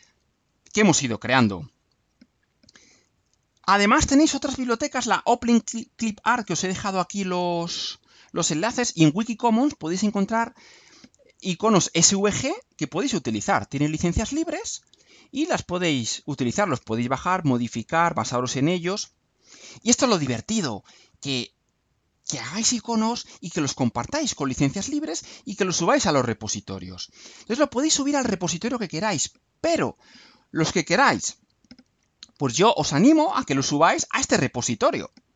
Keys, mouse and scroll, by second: 0.4-0.9 scroll down 2, 1.3-1.9 scroll down 4, 19.5 scroll down 2, 20.5 scroll down 2, 34.7 click.